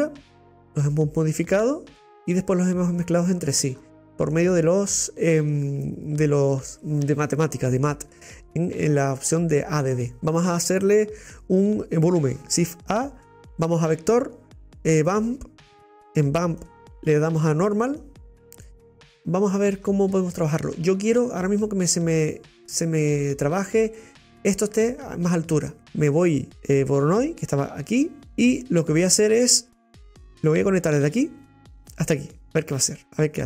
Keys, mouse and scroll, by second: 18.0 click, 19.1-22.8 middle drag, 22.8-25.8 scroll up 5, 25.8-27.2 scroll up 1, 28.2 click.